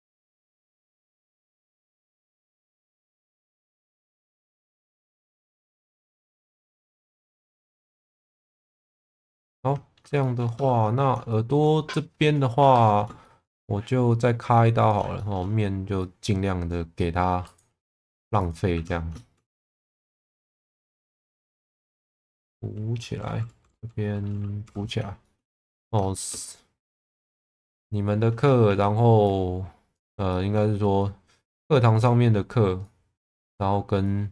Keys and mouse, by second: 1.1 shift+middle click, 3.6 click, 4.1 click, 8.9 Tab, 9.4 middle click, 10.2 shift+middle click, 10.5 Tab, 11.3 shift+middle click, 12.6 2, 13.2 shift+middle click, 14.8 click, 15.1 shift+middle click, 16.0 click, 18.7 1, 19.1 shift+middle click, 19.5 2, 19.8 click, 20.4 shift+click, 24.6 f, 25.2 shift+middle click, 25.6 Tab, 26.1 shift+middle click, 26.8 Tab, 27.3 shift+middle click, 28.6 1, 29.2 click, 30.3 shift+middle click, 32.9 click, 34.0 click.